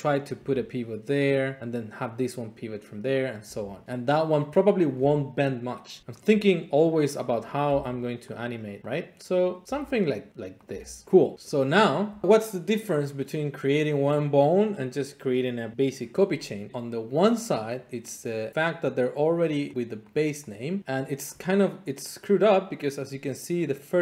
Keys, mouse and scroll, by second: 0.0 click, 0.4 g, 1.2 click, 3.3 click, 3.5 g, 3.8 click, 6.0 g, 6.2 click, 7.4 click, 7.7 g, 8.3 click, 8.8 click, 8.8 g, 9.3 click, 9.6 click, 9.6 g, 10.1 click, 10.7 click, 10.7 g, 11.4 click, 11.8-12.2 scroll, 16.7 Tab, 17.2 click, 18.1 click, 18.5 click, 19.2 click, 19.7 click, 20.1 click, 20.5 click, 20.8 click, 21.0 click, 21.3 click.